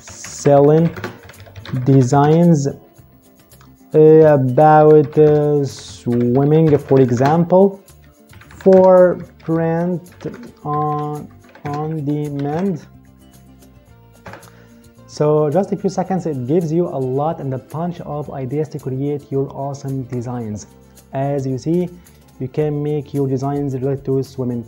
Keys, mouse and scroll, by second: 0.0-2.3 typing, 3.6-12.7 typing, 13.9 Return.